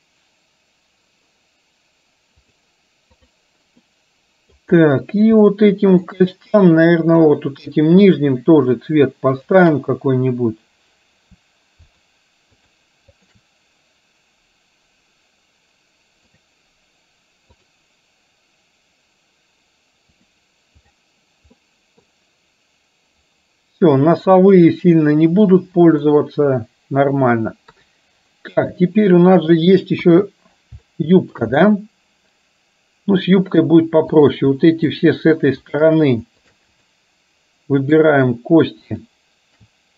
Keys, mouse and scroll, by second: 4.0-4.6 middle drag, 5.6-6.1 shift+middle drag, 7.1 click, 8.2 shift+drag, 12.6 shift+drag, 13.2 shift+click, 20.4 drag, 21.0 click, 21.6-22.1 middle drag, 25.6-26.0 middle drag, 27.7 KP_3, 28.7-29.5 shift+middle drag, 31.0-31.4 shift+middle drag, 31.7-33.6 middle drag, 34.2 click, 34.9 shift+click, 35.7 shift+click, 36.5 shift+drag, 37.0-38.0 middle drag.